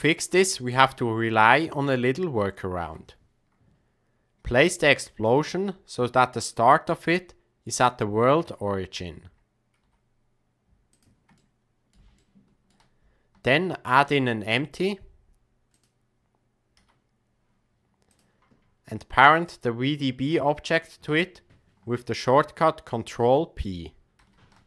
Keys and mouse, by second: 2.8 KP_1, 4.5 g, 8.3 KP_3, 9.8 g, 11.3-11.9 middle drag, 12.1-12.7 shift+middle drag, 13.9 shift+a, 16.8 s, 24.2 ctrl+p.